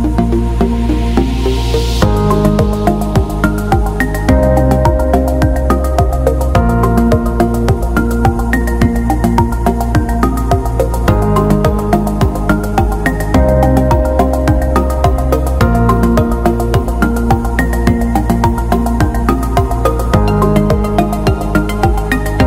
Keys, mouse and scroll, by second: 1.2 click, 2.3 alt+shift+click, 3.7-4.7 alt+scroll down 1, 4.7 click, 5.8-6.7 scroll down 1, 6.9 click, 7.7 click, 9.3-10.1 scroll down 1, 17.1 click, 18.7 ctrl+z, 19.8 click, 21.6 scroll up 1.